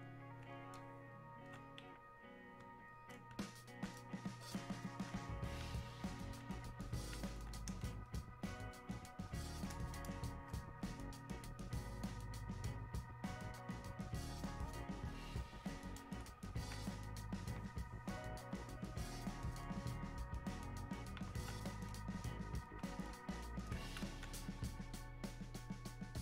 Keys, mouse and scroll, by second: 7.8 space, 8.8 click, 8.9 space, 10.0 click, 11.2 click, 14.3 click, 23.1 click.